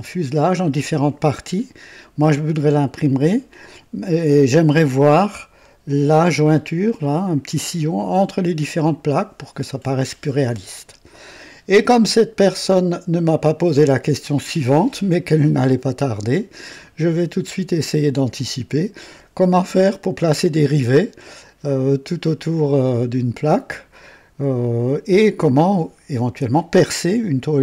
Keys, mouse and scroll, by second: 5.3-5.8 scroll up 3, 9.0-9.6 scroll down 3, 10.1 scroll down 2, 11.5-13.1 right drag, 14.5-15.9 right drag.